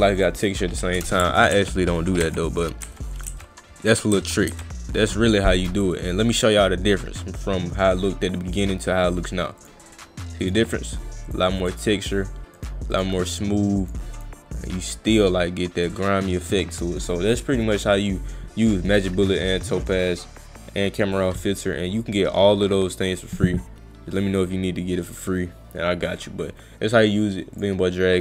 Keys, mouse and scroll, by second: 0.2 click, 9.6 click, 10.4 click, 11.3 click, 11.6 click, 12.6 click, 12.9 click, 13.8 click, 14.2 click.